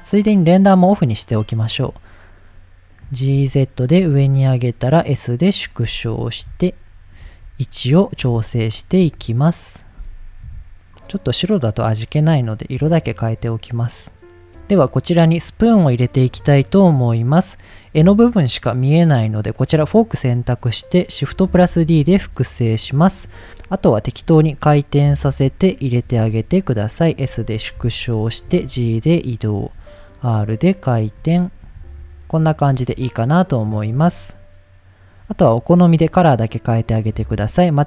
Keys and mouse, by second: 2.0 click, 2.5-3.0 middle drag, 3.1 g, 3.2 z, 3.7 click, 4.0 s, 5.6 click, 6.4 KP_7, 7.2 g, 7.9 click, 8.2 r, 8.7 click, 9.0 g, 9.5 click, 10.4 KP_1, 11.0 click, 12.2 click, 13.1 drag, 13.8 click, 16.7 middle click, 19.1 click, 21.0 click, 21.5 shift+d, 22.1 x, 22.9 click, 23.5-26.1 typing, 25.1 click, 25.9 click, 27.2 click, 27.8 KP_7, 28.4 g, 29.2 click, 29.6 r, 30.1 click, 31.4 shift+middle click, 31.8 g, 32.1 middle click, 33.6 click, 36.9 click.